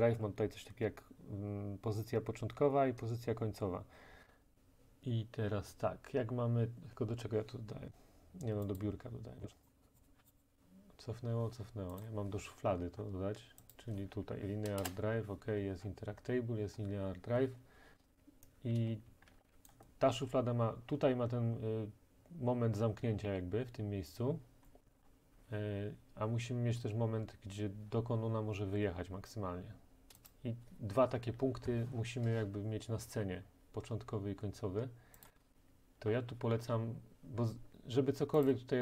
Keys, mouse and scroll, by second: 8.8 click, 9.4 click, 9.7 click, 10.2 Escape, 10.3 click, 10.4 click, 12.1 click, 12.6-13.1 scroll, 13.8 click, 14.8 Return, 15.5 click, 15.5-17.2 scroll, 18.8-19.5 typing, 19.7 right click, 20.5-24.7 right drag, 24.9-30.2 middle drag, 24.9 scroll down 1, 25.0 scroll down 1, 25.1 scroll down 1, 25.1-26.8 scroll down 1, 26.8-29.2 scroll down 1, 29.2-30.2 scroll down 1, 30.3 click, 35.3 click, 38.5 click.